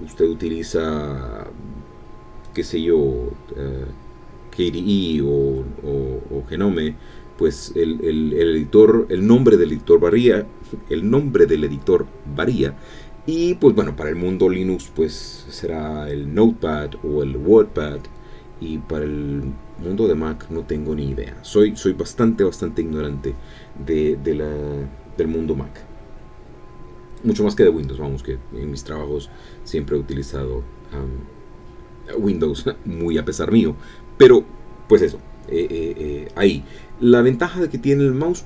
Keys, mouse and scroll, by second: 26.3-28.1 typing, 28.0 Print, 29.8 i, 30.0 t, 30.5 Escape, 31.8-33.9 typing, 34.4 Return, 35.2 BackSpace, 35.4 1, 36.4 Return.